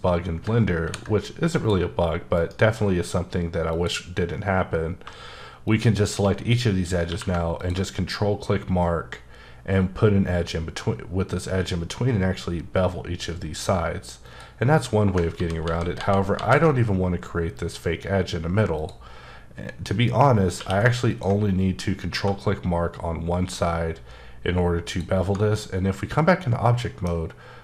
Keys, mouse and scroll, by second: 0.8 ctrl+r, 1.5 click, 2.3 right click, 3.7 click, 7.1 q, 7.6 ctrl+click, 8.4-10.9 scroll up 7, 15.1 click, 15.3 ctrl+z, 15.6 ctrl+z, 15.9 ctrl+z, 16.3 ctrl+z, 18.8 click, 20.6 q, 21.1 ctrl+click, 22.1 1, 22.5-24.8 scroll up 4, 24.9 click, 25.5 middle click.